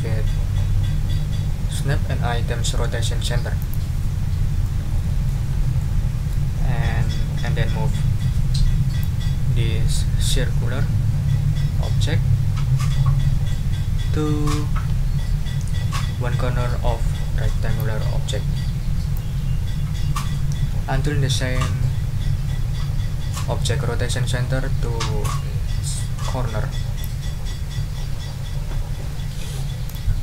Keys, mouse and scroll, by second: 3.6 click, 4.6 click, 5.8 click, 9.0-10.7 drag, 15.8-17.9 drag, 19.1-27.2 drag, 29.8 click.